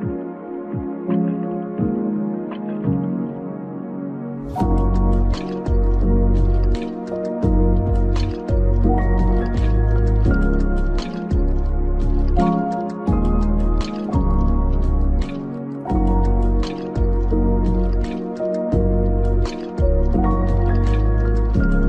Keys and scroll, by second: 1.2 ctrl+v, 13.5 Right.